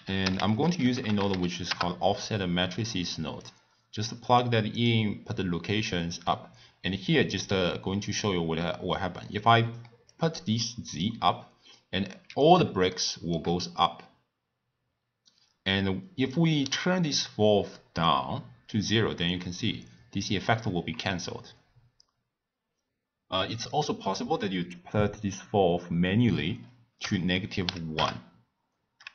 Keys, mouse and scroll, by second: 0.5 f, 3.9-5.3 drag, 7.5 click, 10.1-12.9 drag, 12.9-16.0 shift+middle drag, 16.3-19.5 drag, 24.0-27.2 drag.